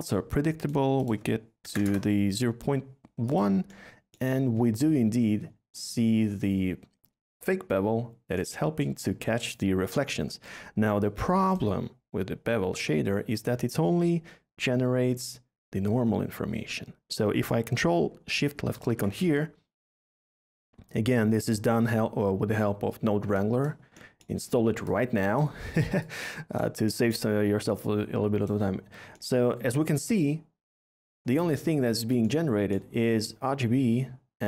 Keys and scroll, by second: 1.6 BackSpace, 1.7 1, 1.8 Return.